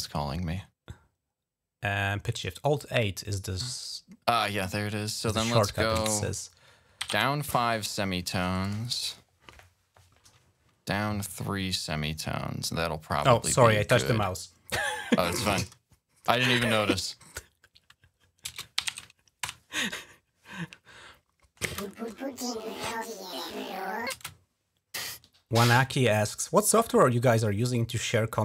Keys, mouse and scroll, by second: 1.9 click, 4.3 click, 5.7-7.4 typing, 8.3 click, 8.5 right click, 10.3 right click, 15.4 click, 17.3 click, 17.6 click, 18.3-19.2 typing, 19.2 Return, 20.8 click, 21.5 space, 24.0 space, 25.7 click.